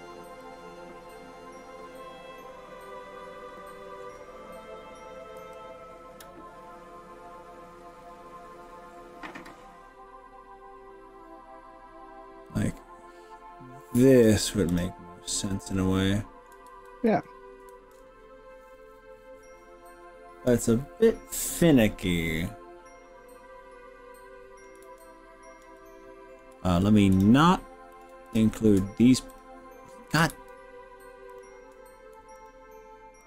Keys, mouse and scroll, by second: 0.5-0.9 drag, 5.5 g, 7.8-8.5 scroll down 4, 8.7-9.6 scroll up 4, 9.6 scroll up 3, 10.1-11.1 scroll up 4, 14.1 click, 14.7 click, 15.3-16.5 middle drag, 16.7 ctrl+z, 17.1 ctrl+z, 17.7 ctrl+shift+z, 22.5-24.6 middle drag, 24.9 ctrl+z, 25.8-26.5 middle drag, 27.3 ctrl+click, 28.3 click, 29.3 click, 29.3 scroll up 1, 30.5 ctrl+z, 31.3 ctrl+click, 32.5 shift+click.